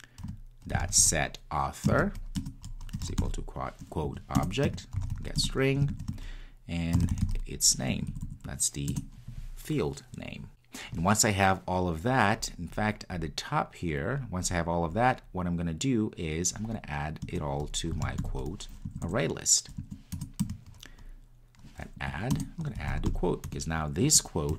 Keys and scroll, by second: 20.1 Return.